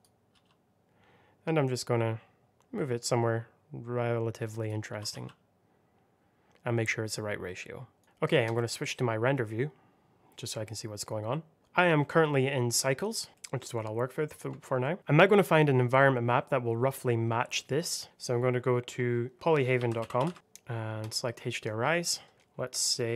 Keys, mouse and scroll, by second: 0.2 g, 4.5 click, 4.8 s, 5.0 x, 7.9 click, 10.0-11.6 scroll up 1, 13.0 click, 13.3 middle click, 13.7 scroll up 1, 14.7 shift+middle click, 18.0 click, 19.3 BackSpace, 19.9 o, 20.1 l, 20.2 y, 20.3 Return, 20.9 click, 23.1 c.